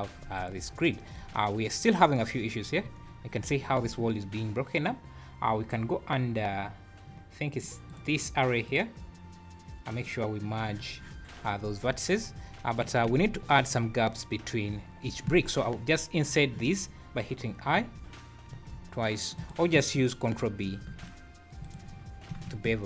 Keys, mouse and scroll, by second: 0.3 click, 1.3 scroll up 3, 2.8-3.3 scroll down 6, 7.5 click, 7.9 click, 8.7 click, 9.9 click, 11.6-11.9 scroll up 4, 12.6 Tab, 13.1 a, 13.3-13.6 scroll up 3, 14.2-14.9 scroll down 5, 14.9 scroll up 2, 17.8 i, 20.7 ctrl+b.